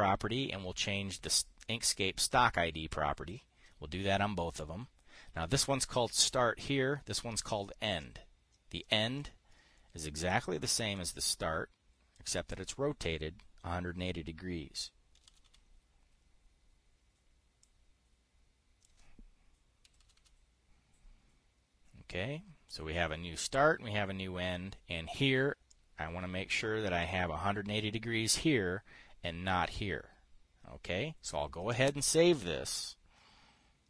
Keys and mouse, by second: 8.5-9.8 drag, 11.5-12.7 drag, 15.4-16.4 typing, 18.1-19.4 drag, 20.1-21.2 typing, 26.2-27.6 drag, 32.2 click.